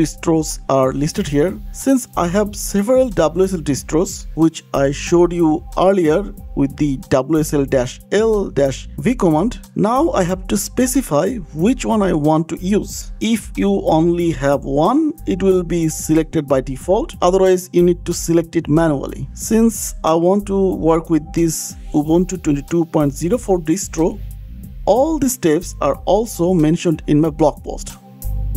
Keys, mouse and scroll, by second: 0.7 click, 3.3 click, 6.7 click, 7.7 click, 12.7 click, 18.0 click, 19.8 click, 20.5 shift+click, 21.3 click, 21.5 click, 21.5 click, 21.7 scroll down 6, 22.7 click.